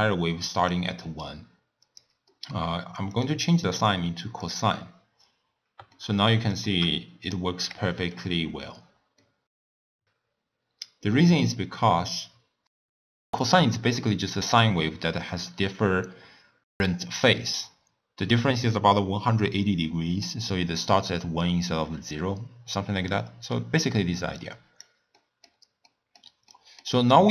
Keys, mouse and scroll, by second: 0.8 d, 1.1 d, 1.3 right click, 2.1 d, 2.3-3.2 middle drag, 3.2-5.3 drag, 5.3-6.0 scroll up 1, 6.0-8.4 shift+middle drag, 8.4-8.9 scroll down 3, 8.9-9.3 scroll up 1, 9.3 shift+middle drag, 9.6 middle click, 9.7-11.1 drag, 12.8 click, 23.0-24.4 middle drag, 24.4 click, 25.1-27.2 middle drag, 27.2-27.3 scroll down 3.